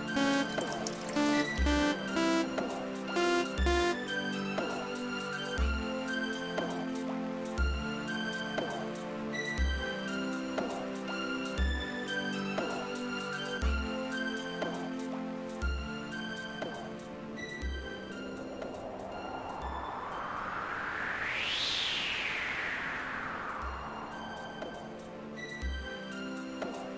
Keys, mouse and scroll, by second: 0.1 space, 4.0 space, 10.6 right click, 12.2-15.2 drag, 19.7 click, 22.1 click, 23.1-24.8 typing.